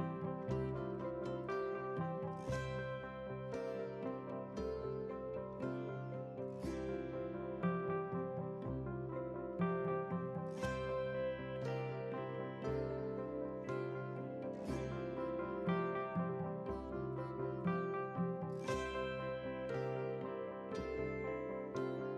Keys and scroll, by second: 16.5 ctrl+c.